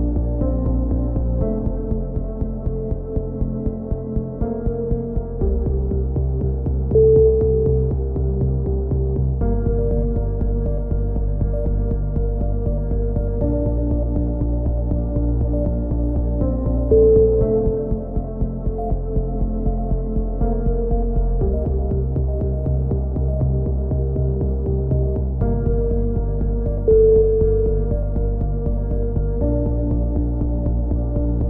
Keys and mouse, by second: 0.1 s, 0.6 a, 1.0-2.7 drag, 2.0 KP_7, 3.1 k, 5.3 right click, 5.5 KP_3, 7.7-9.4 drag, 8.9 a, 10.4 right click, 10.9 KP_7, 13.3 right click, 13.6 click, 14.5 right click, 14.7 click, 15.3 a, 15.3 z, 15.8 click, 16.8 right click, 16.8 KP_3, 16.9 z, 17.5 z, 17.9 a, 18.0 click, 20.2 click, 20.2 right click, 20.6-23.6 typing, 21.3 click, 22.4-23.4 drag, 23.4 right click, 24.0-25.5 drag, 24.4 right click, 25.6 right click, 25.9 click, 26.2-29.1 typing, 26.5-29.1 right drag, 28.4 click, 29.6 click.